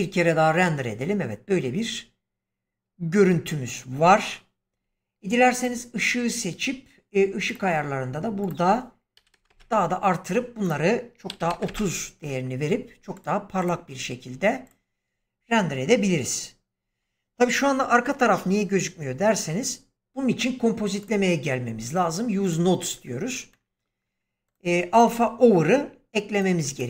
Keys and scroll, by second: 3.9 Escape, 9.1 typing, 9.4 Return, 11.2 typing, 11.6 Return, 16.7 Escape.